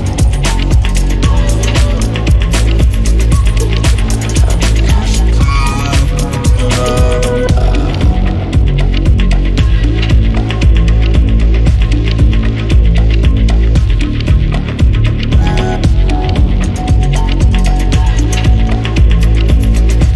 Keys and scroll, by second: 0.4 Escape, 11.7-13.9 typing, 12.8 Return, 17.6 Escape.